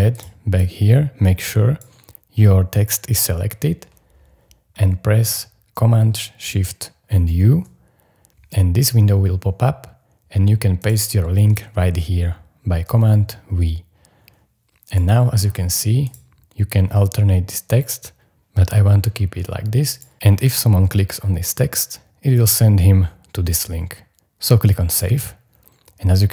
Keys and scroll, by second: 7.3 shift+super+u, 12.8 super+v.